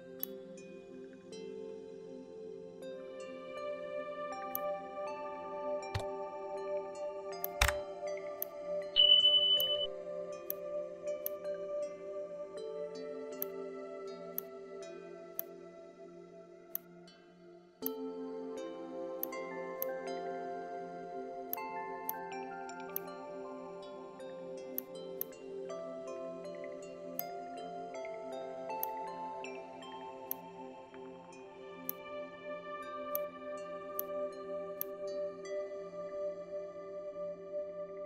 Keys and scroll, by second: 2.1 KP_9, 2.3 KP_0, 5.9 ctrl+d.